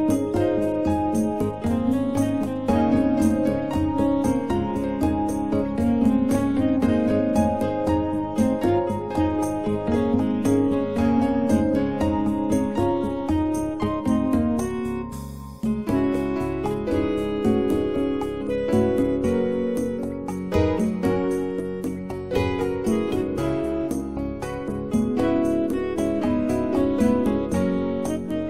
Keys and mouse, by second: 1.2-1.9 drag, 2.4 shift+a, 6.3-7.4 middle drag, 7.4-9.1 drag, 9.1-9.7 middle drag, 9.7-11.1 drag, 15.2 s, 18.6 typing, 20.0 typing, 22.1-26.7 right drag, 27.5 x, 27.9 click.